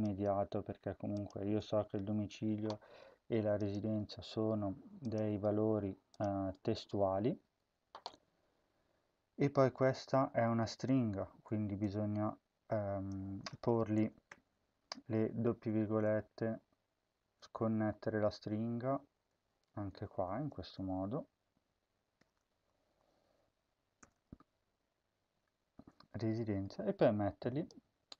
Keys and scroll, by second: 0.0 Return, 1.7 BackSpace, 3.9 Return, 5.2 Return, 14.2 @, 15.6 Left, 15.8 ., 16.0-17.2 Right, 17.5 Left, 17.7 Left, 18.0 ., 18.2 Down, 18.4-19.3 Left, 20.2 shift+End, 22.1 @, 22.4 Left, 22.8 Left, 23.0 Right, 23.9 ., 24.0-25.6 Right, 25.6 ..